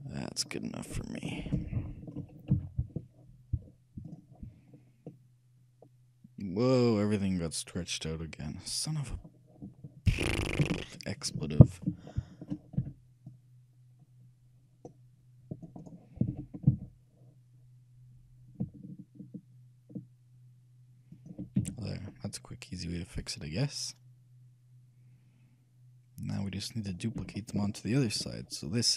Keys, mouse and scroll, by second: 0.8 middle click, 1.9-3.8 shift+middle drag, 2.6 shift+z, 5.3-7.0 middle drag, 9.3-11.3 middle drag, 11.5 a, 12.2-14.6 shift+middle drag, 12.9 c, 16.0-17.6 right drag, 16.4 g, 21.7 a, 22.0-23.2 middle drag, 23.3 middle click, 27.3 a.